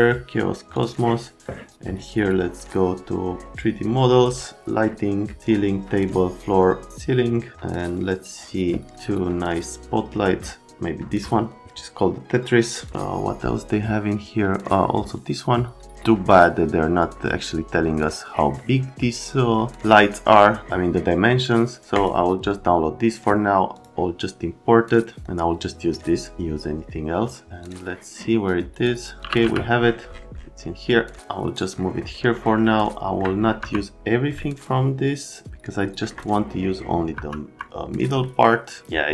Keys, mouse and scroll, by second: 0.7 click, 17.0 click, 18.0 click, 21.9 click, 23.7 click, 27.6 click, 28.8 scroll, 29.2 click, 29.4 x, 31.2 click, 32.4 middle click, 32.5 right click, 32.9 right click, 33.6 F3, 34.4 right click, 37.1 F3, 37.5 F3, 37.9 middle click.